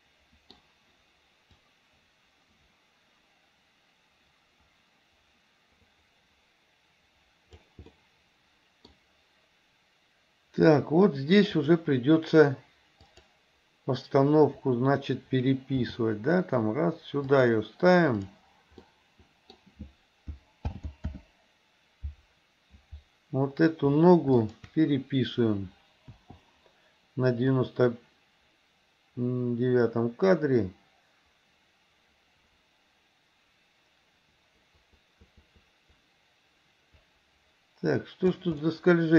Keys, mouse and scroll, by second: 1.7-7.8 drag, 8.0-8.9 middle drag, 11.6 click, 13.1 click, 15.8 g, 18.9 middle click, 20.8 alt+g, 21.1 alt+r, 24.5 shift+click, 26.2 i, 27.6-38.5 drag, 38.7-39.1 middle drag.